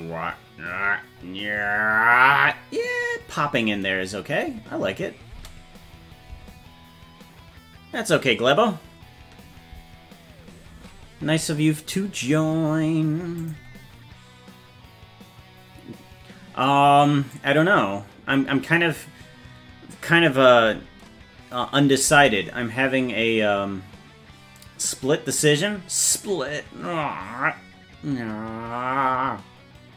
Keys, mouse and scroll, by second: 5.3 space, 13.4 click, 17.4-20.1 drag, 22.1 space.